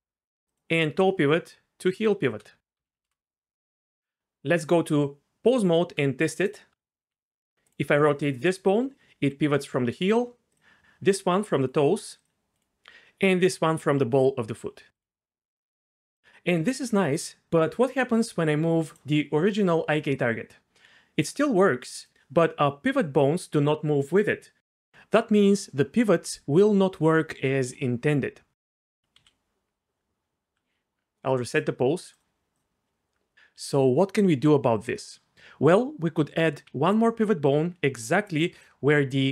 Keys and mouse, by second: 1.9 shift+click, 2.7 ctrl+p, 4.5 Tab, 6.4 click, 7.0 r, 7.6 right click, 8.1 r, 9.1 r, 10.0-11.0 right drag, 11.0 r, 12.3 r, 12.5 right click, 13.2 r, 18.9 click, 19.4 g, 21.4 r, 22.0 click, 25.9 r, 26.2 r, 26.5 r, 28.8-29.2 right drag, 29.2 a, 31.6 click, 36.7-39.3 d, 38.6 click.